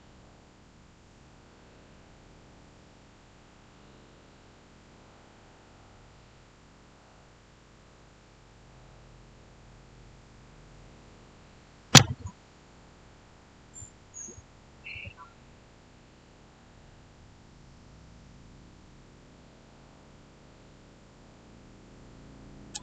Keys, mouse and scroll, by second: 22.6-22.8 typing.